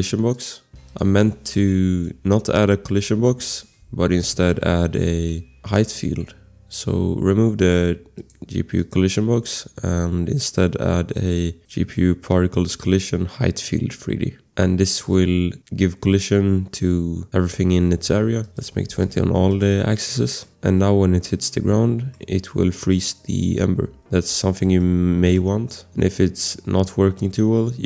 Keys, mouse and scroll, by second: 0.5 click, 3.2 Delete, 5.2 click, 10.5-11.5 scroll, 11.5 click, 14.6 scroll, 18.1 click, 18.9 ctrl+c, 19.0 click, 19.2 ctrl+v, 19.5 click, 20.1 scroll, 20.4 click, 20.7 click, 21.3 click, 22.1 click, 24.2 click, 24.2 scroll, 24.8 click, 25.0 click, 25.3 click, 25.4 scroll, 26.4-27.4 scroll.